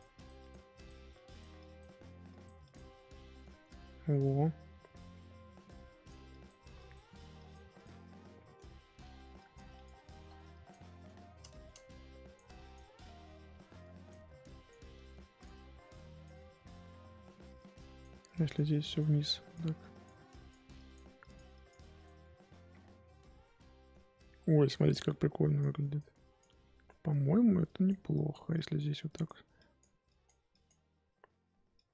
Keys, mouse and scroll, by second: 2.9 scroll down 4, 3.1 middle click, 3.8-4.4 scroll up 5, 4.4 scroll down 2, 5.3-5.8 scroll up 2, 5.8-8.0 drag, 8.0-8.3 scroll down 1, 8.3 middle click, 8.6-9.3 scroll up 3, 9.3 click, 10.0 shift+middle click, 10.5 click, 10.9-11.9 middle drag, 11.9-13.0 drag, 13.0 middle click, 13.2-13.8 scroll up 1, 13.8-17.0 drag, 17.0 middle click, 17.5-22.2 drag, 22.2 middle click, 22.8 scroll down 3, 23.0-24.0 middle drag, 24.0-24.5 scroll up 3, 24.5 middle click, 25.4-26.6 drag, 26.6-27.6 middle drag, 27.6-31.9 drag.